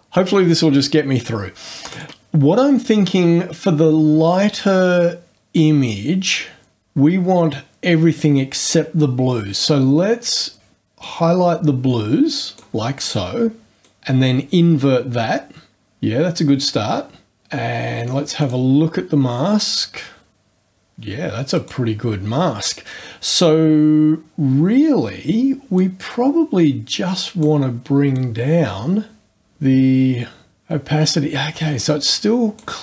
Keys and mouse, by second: 1.9 click, 9.6-10.8 drag, 11.0-12.8 drag, 13.8 click, 18.4 click, 21.6 click, 25.8-27.6 drag, 28.1-32.8 drag.